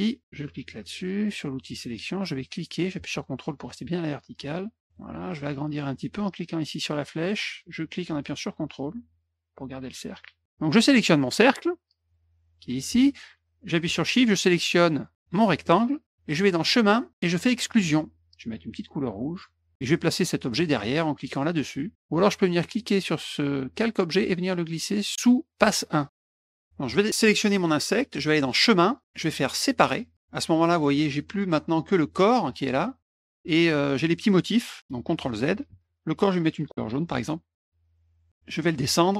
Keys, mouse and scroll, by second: 0.6 click, 2.6-4.9 drag, 7.5 click, 12.1 click, 15.2 shift+click, 16.6 click, 17.7 click, 19.4 click, 22.7-25.3 drag, 26.9 click, 28.4 click, 29.9 click, 32.0 click, 32.4-33.3 drag, 35.7 ctrl+z, 37.1 click, 38.8 click.